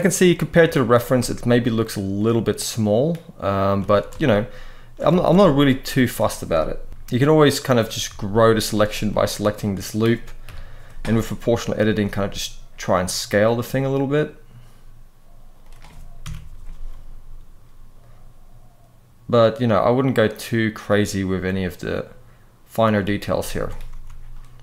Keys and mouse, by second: 0.4 shift+middle click, 0.9 Tab, 2.0 middle click, 3.6 alt+a, 5.0 alt+a, 5.3 alt+shift+click, 5.7 alt+shift+click, 6.7 ctrl+KP_Add, 6.9 ctrl+KP_Add, 7.8 z, 8.8 click, 9.4 middle click, 10.1 KP_3, 11.3 click, 11.7 s, 15.9 ctrl+KP_Subtract, 16.4 s, 20.5 click, 21.0 g, 22.6 click, 23.1 z, 23.7 Tab, 24.1-24.6 middle drag.